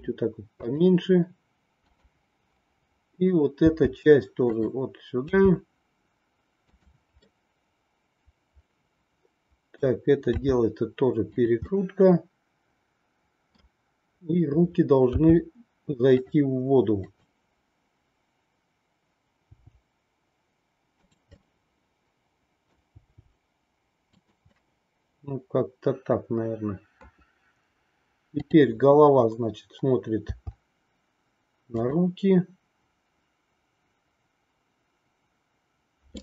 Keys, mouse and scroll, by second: 3.6 r, 5.3 g, 7.3-9.8 middle drag, 9.8-10.3 scroll down 1, 10.3 r, 11.8-13.5 middle drag, 15.2 g, 19.5 g, 21.6-22.6 middle drag, 23.0 g, 24.7 scroll up 1, 24.8-27.0 middle drag, 28.3-29.7 drag, 30.3 r, 36.1-36.2 middle drag.